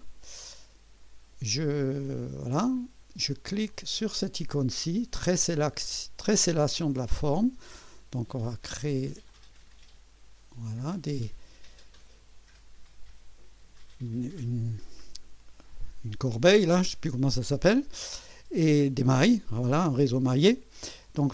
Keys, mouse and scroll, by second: 2.2 click, 9.3 click.